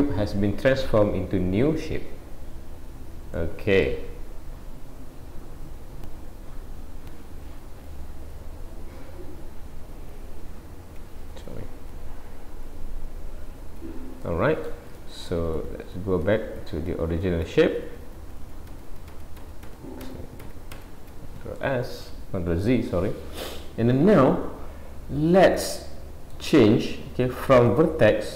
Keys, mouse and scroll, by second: 3.4 middle click, 11.3 Escape, 12.7 alt+s, 13.5 alt+a, 14.3 middle click, 15.0 middle click, 15.7 ctrl+z, 16.0 ctrl+z, 16.3 ctrl+z, 16.6 ctrl+z, 16.9 ctrl+z, 17.1 ctrl+z, 17.5 ctrl+z, 17.7 ctrl+z, 17.9 ctrl+z, 18.1 ctrl+z, 18.2 ctrl+z, 18.4 ctrl+z, 18.7 ctrl+z, 18.9 ctrl+z, 19.2 ctrl+z, 20.1 ctrl+z, 20.4 ctrl+z, 20.8 ctrl+z, 21.6 middle click, 26.7-27.7 scroll up 2, 27.7 click, 27.7 scroll up 1.